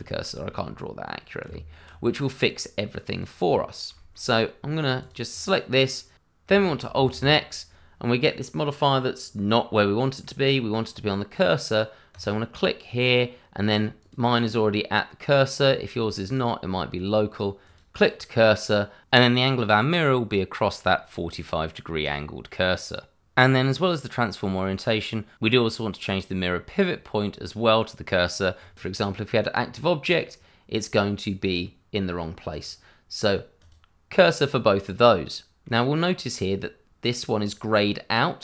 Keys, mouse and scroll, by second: 0.3 scroll down 1, 0.6 middle click, 1.4 Tab, 1.9 scroll down 1, 3.1 click, 3.4-3.9 scroll up 1, 3.9 shift+middle click, 4.0 middle click, 5.0 click, 5.4 middle click, 6.6 alt+x, 9.6 middle click, 12.1 click, 12.8 middle click, 14.0 click, 16.2 click, 19.6 middle click, 24.0 click, 28.6 click, 29.2 middle click, 32.5 click, 34.1 middle click.